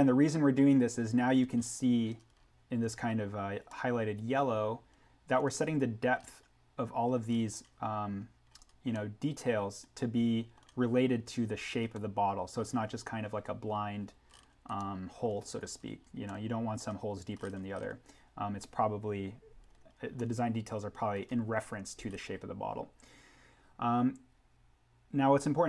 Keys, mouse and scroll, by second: 1.5-2.0 scroll up 1, 2.3-3.6 scroll down 1, 4.5 scroll, 6.2-7.3 scroll up 1, 8.5-8.9 scroll down 1, 8.9 middle click, 9.1 scroll, 11.8 scroll up 1, 12.0-14.3 middle drag, 14.3-14.7 scroll up 1, 14.7 middle click, 15.6-16.2 scroll down 1, 16.2 middle click, 16.3 scroll, 19.6-20.0 scroll up 1, 20.0 scroll down 1, 20.1 middle click, 20.3 scroll, 23.0-23.9 scroll up 1.